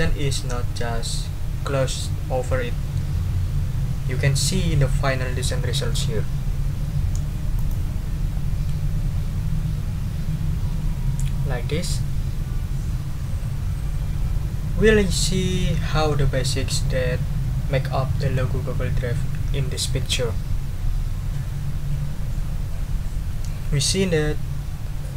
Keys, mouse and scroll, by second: 7.5 click.